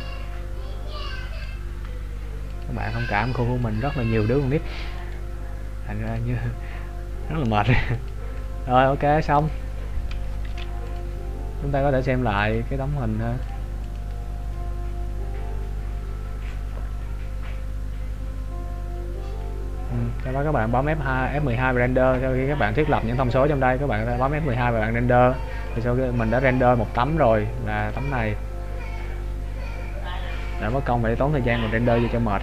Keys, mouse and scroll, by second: 2.8 click, 5.1 right click, 6.5 click, 9.6 click, 10.5 ctrl+s, 12.6 click, 23.3-23.6 scroll down 2.